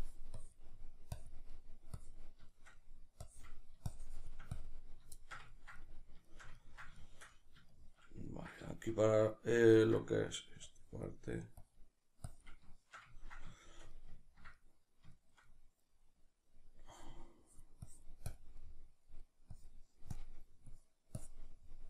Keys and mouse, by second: 0.7 middle click, 1.1 click, 1.5 middle click, 2.0 click, 2.5 shift+middle click, 3.2-5.2 drag, 5.2-10.7 shift+middle drag, 10.7-12.7 drag, 12.7-16.9 shift+middle drag, 16.9-18.6 drag, 18.6 middle click, 19.5-21.6 drag, 21.6-21.8 middle drag.